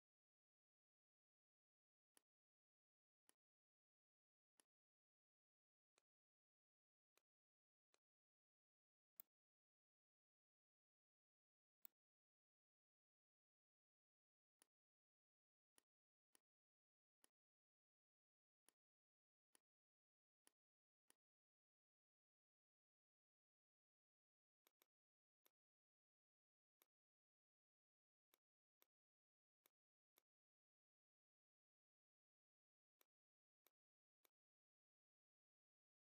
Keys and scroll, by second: 1.8 z, 18.6 space, 19.2 a, 22.1 v, 29.6 space, 31.2 shift+m.